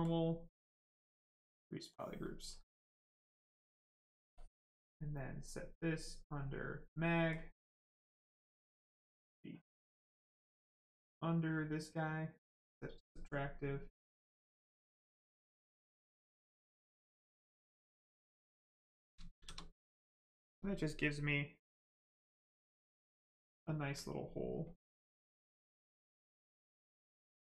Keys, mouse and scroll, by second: 2.3 right click, 4.4 shift+click, 9.0 click, 12.4 click, 13.0 right click, 15.5 click, 17.8 click, 19.4 shift+f, 19.8 right click, 23.1 alt+click, 24.6 click.